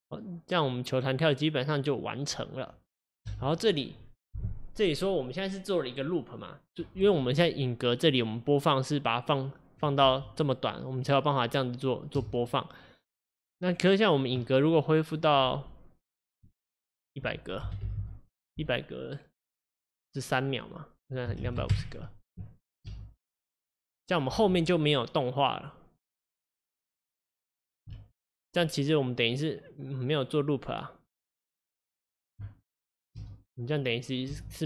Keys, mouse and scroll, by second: 3.3 space, 8.1-10.1 drag, 10.1 space, 12.2 space, 22.4-22.9 scroll down 1, 22.9 space, 24.4 space, 27.5-33.2 drag, 33.2 space, 34.4 space.